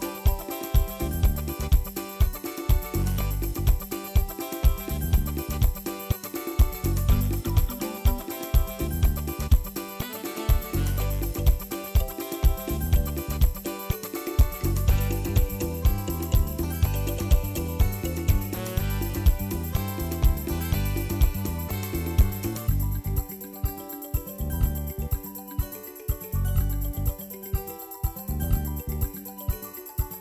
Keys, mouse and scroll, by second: 0.0-2.0 shift+middle drag, 2.0 r, 4.8 g, 7.9 g, 11.4 alt+z, 11.5 click, 11.8 alt+z, 12.0 g, 13.0 g, 14.0 alt+z, 14.2 click, 14.6 alt+z, 14.8 g, 16.4 click, 16.8 ctrl+2, 17.5 Tab, 17.8 alt+z, 18.0 click, 18.3 alt+z, 18.5 g, 19.3 Tab, 19.5 ctrl+s, 19.6-20.2 middle drag, 20.2 KP_1, 20.3 scroll down 2, 20.5-21.2 shift+middle drag, 21.2 shift+a, 22.1 s, 23.2 drag, 23.4 right click, 24.1 ctrl+s, 24.3-24.8 drag, 24.8 shift+s, 25.3 g, 27.0 s, 27.7-28.0 middle drag, 28.0 click, 28.5-30.2 typing, 28.7 drag, 30.1 scroll up 1.